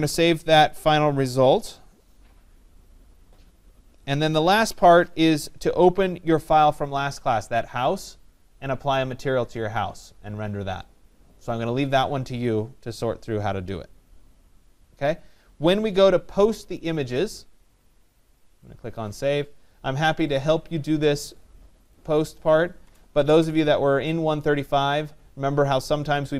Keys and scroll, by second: 22.4 BackSpace.